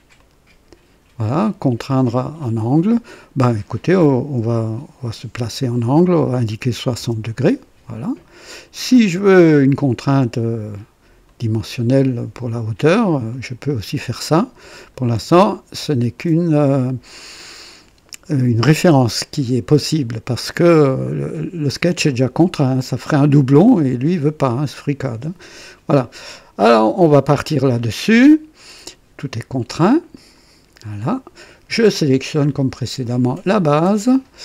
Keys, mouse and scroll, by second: 0.1 click, 6.7 KP_6, 6.9 KP_0, 7.9 click, 8.9 scroll down 1, 9.3 right click, 11.2 click, 13.3 click, 14.7 click, 16.1-20.1 drag, 30.1 click, 32.8 click.